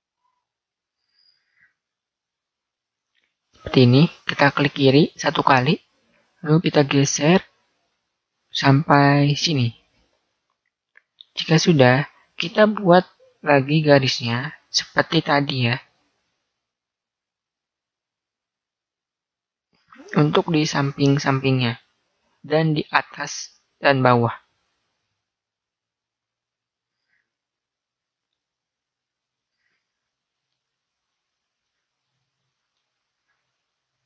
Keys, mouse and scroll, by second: 15.8 ctrl+r, 25.0 ctrl+r, 28.6 ctrl+r, 30.9 r, 33.1 ctrl+r.